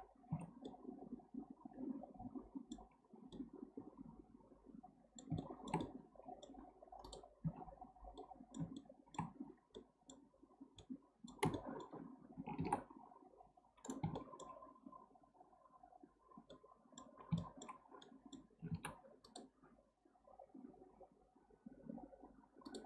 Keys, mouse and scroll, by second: 0.4 Tab, 0.6-2.9 middle drag, 2.9-3.3 scroll down 3, 3.3-7.0 middle drag, 7.0 click, 7.5 Tab, 7.8-8.2 scroll up 1, 8.2-8.7 middle drag, 8.7 scroll up 1, 8.8-9.7 shift+middle drag, 9.7-10.4 scroll up 1, 10.4 scroll up 1, 10.6 scroll down 1, 10.8-12.6 middle drag, 12.6 ctrl+r, 14.2 shift+middle click, 14.6-15.7 scroll down 2, 15.7 scroll up 1, 16.5 middle click, 17.2 scroll down 2, 17.4-18.7 shift+middle drag, 18.7 ctrl+r.